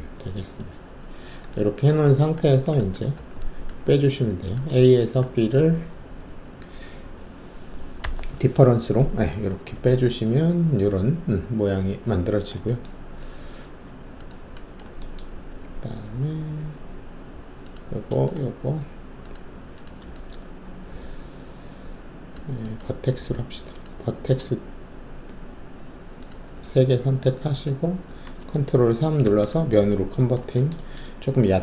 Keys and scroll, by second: 1.0 alt+shift+q, 3.1 alt+`, 8.0 alt+o, 15.8 alt+2, 22.8 alt+1, 29.2 ctrl+shift+3.